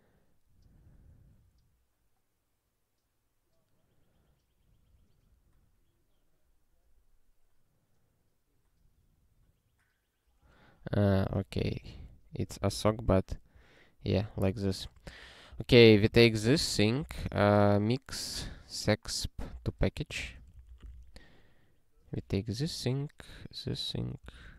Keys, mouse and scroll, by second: 5.4 scroll, 5.7-7.0 scroll up 1, 11.4 click, 11.9 ctrl+alt+t, 12.5 ctrl+e, 14.3 ctrl+p, 15.1 ctrl+p, 15.5 ctrl+n, 15.7 ctrl+p, 16.1 Return, 16.4-17.9 typing, 19.6 Return, 20.5 ctrl+n, 20.7 ctrl+e, 24.3 alt+^.